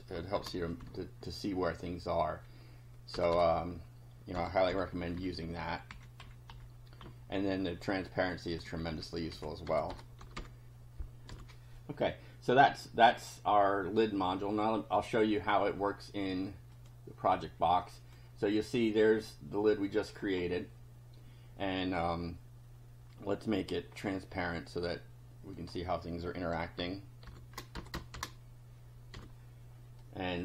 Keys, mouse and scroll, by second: 0.3 shift+3, 0.6 shift+Up, 0.8 shift+Right, 3.1 BackSpace, 4.4 -, 4.7 5, 5.1 Down, 5.5 Right, 5.9 Up, 6.2 End, 6.5 Up, 7.1 Right, 9.3 Left, 9.7-10.8 typing, 11.3 F5, 12.3-14.1 drag, 16.7 click, 17.6 click, 23.9 scroll down 1, 25.5 click, 27.2 shift+7, 27.7 BackSpace, 28.1 shift+5, 29.1 F5, 30.0 click.